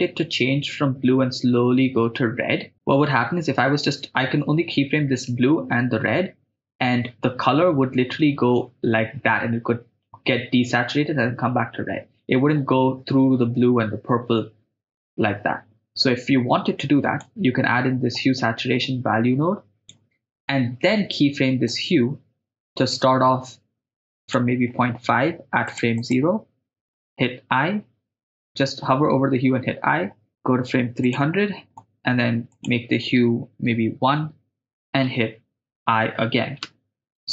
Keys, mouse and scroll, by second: 17.7-18.2 middle drag, 18.9-20.4 drag, 20.4 middle click, 21.7-25.7 drag, 25.8 click, 26.0 click, 27.4 i, 29.3 i, 30.3 click, 31.2 click, 32.5-34.2 drag, 36.6 i.